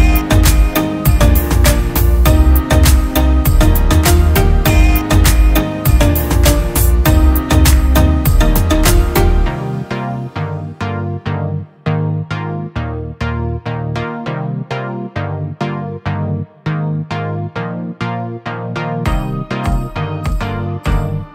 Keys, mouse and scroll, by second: 0.5 alt+shift+click, 2.1 ctrl+click, 4.7 ctrl+t, 5.1 ctrl+click, 6.5 ctrl+click, 9.3 ctrl+click, 10.8 ctrl+click, 11.9 ctrl+t, 12.7 alt+shift+click, 15.4 Down, 15.5 Down, 16.2 Down, 16.3 Down, 16.6 Return.